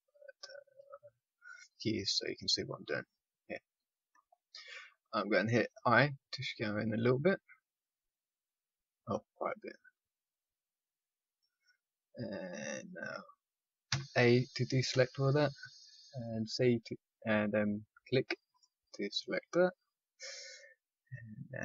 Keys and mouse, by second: 0.7 n, 5.9 i, 11.9-14.8 middle drag, 13.8 a, 14.8 c, 18.5-21.6 right drag.